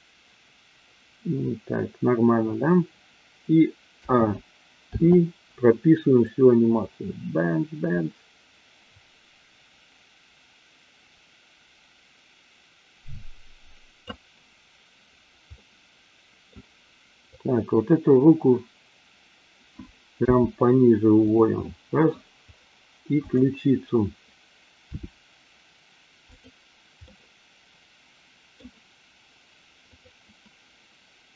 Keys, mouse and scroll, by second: 3.9 a, 4.8 i, 6.3-14.1 drag, 15.6-16.4 middle drag, 17.3 click, 20.2 g, 21.2 click, 21.6 middle click, 23.2 click, 24.8 r, 26.2 click, 27.1-28.7 middle drag, 29.8 click.